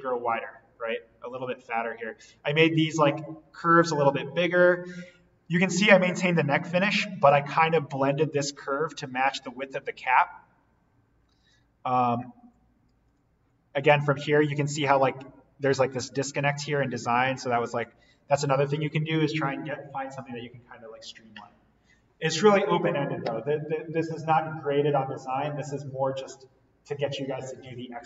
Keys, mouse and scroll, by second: 13.0 click, 17.6 click.